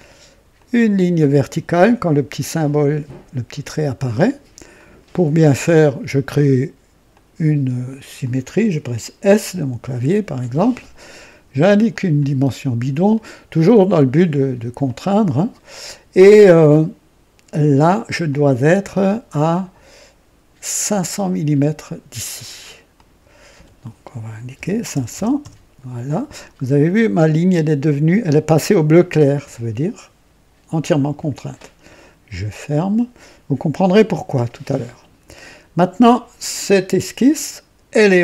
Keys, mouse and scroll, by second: 0.5 click, 3.6 click, 4.7 right click, 5.7 click, 7.0 click, 8.2 click, 9.6 s, 11.8 click, 13.1 click, 14.8 click, 18.2 click, 20.8 click, 22.9 click, 24.5 KP_5, 24.8 KP_0, 25.1 KP_0, 25.3 KP_Enter, 26.4 typing, 32.2 click, 34.2-35.4 drag.